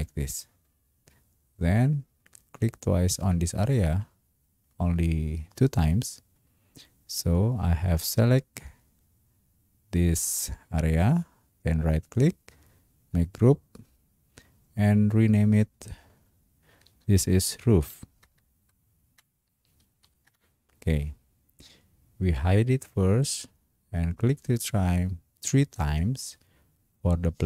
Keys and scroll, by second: 17.3-18.4 typing, 19.7 o, 20.1 f, 20.3 Return.